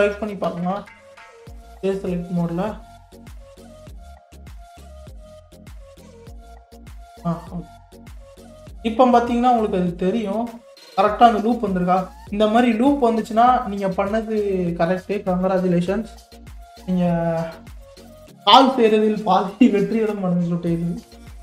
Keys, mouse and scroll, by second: 0.5 2, 3.0 alt+click, 4.0 alt+click, 4.7 alt+click, 5.2 alt+click, 6.4 alt+click, 7.4-8.6 middle drag, 8.6-8.9 scroll down 1, 8.9-9.9 middle drag, 9.9-10.3 scroll down 1, 10.3-12.2 middle drag, 12.2-12.9 scroll down 5, 12.9 scroll up 1, 13.0-16.1 middle drag, 18.4 KP_3, 19.2 scroll up 5, 19.9 click, 20.7-21.4 scroll up 6.